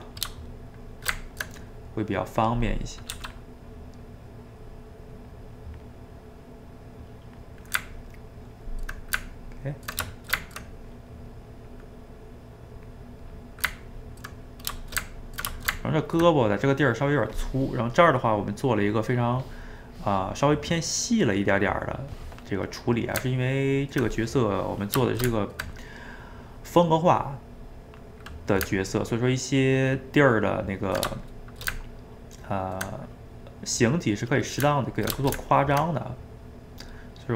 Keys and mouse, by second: 0.9 shift+right click, 1.2 ctrl+middle click, 2.1 click, 2.8 middle click, 3.1 f, 3.5 middle click, 4.0-6.0 drag, 6.0-7.1 middle drag, 7.1 click, 7.6-11.3 ctrl+middle drag, 11.3 click, 11.8 middle click, 12.3-13.5 drag, 13.5-19.0 ctrl+middle drag, 22.7-37.3 middle drag.